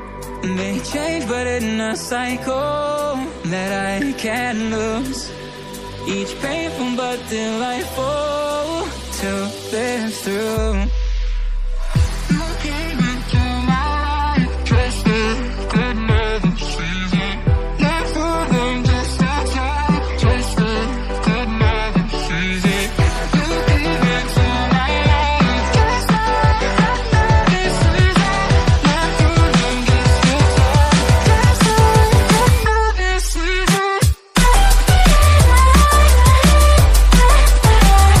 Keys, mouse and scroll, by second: 0.7 n, 1.1 shift+d, 2.5-2.8 scroll up 1, 2.8 scroll down 1, 3.1 click, 4.1 click, 4.2-5.0 scroll up 1, 5.0 shift+s, 6.3 shift+a, 7.9 shift+a, 9.5 KP_7, 9.7 KP_9, 10.2 scroll down 1, 10.5 s, 12.0 s, 14.4 click, 15.2 KP_1, 15.6-16.0 scroll up 2, 16.1 s, 17.1 g, 18.4 click, 18.7 click, 19.8-21.5 drag, 22.7-23.7 drag, 23.7 scroll down 1, 24.0 click, 24.8 drag, 25.4 click, 25.6-26.4 drag, 27.0 click, 28.3 h, 28.6 click, 31.5 KP_7, 31.8 KP_9, 32.3-32.6 scroll down 1, 32.6 shift+a, 33.7-34.2 scroll up 4, 34.2 s, 35.1 s, 37.2 KP_1, 37.6-38.2 scroll up 2.